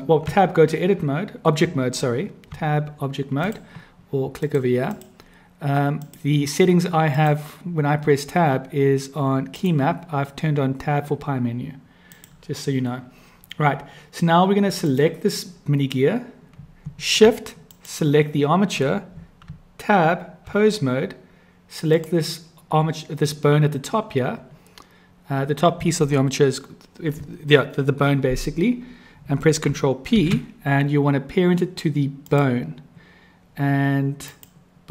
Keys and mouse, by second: 2.5 Tab, 4.4 click, 5.9-7.4 drag, 14.9 click, 17.6 shift+click, 19.5 Tab, 21.9 click, 30.1 ctrl+p, 34.1 click.